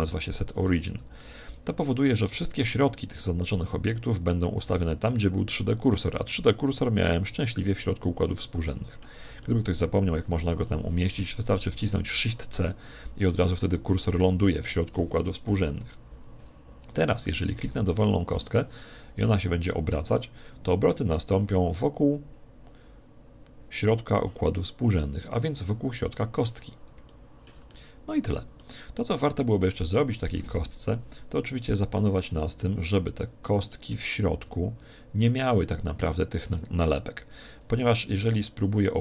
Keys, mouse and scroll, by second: 1.9-3.5 middle drag, 7.7-9.3 middle drag, 11.9 middle click, 12.1 shift+c, 13.5-15.1 middle drag, 15.1 a, 15.5 KP_1, 16.9 right click, 17.3 z, 17.9-19.5 middle drag, 18.5 right click, 19.4 r, 27.1-31.9 middle drag, 32.5 right click, 33.1-35.3 middle drag, 35.3 g, 35.7 click, 37.1 Escape, 37.4 click, 37.8 ctrl+z, 38.9-39.0 right drag.